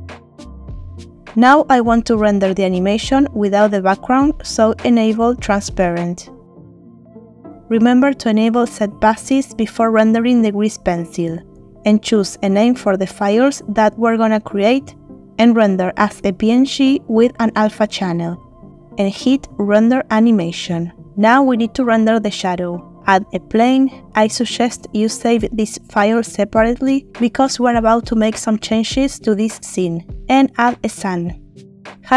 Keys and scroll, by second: 21.4 shift+a, 25.2 s, 29.1 z, 30.2 shift+a.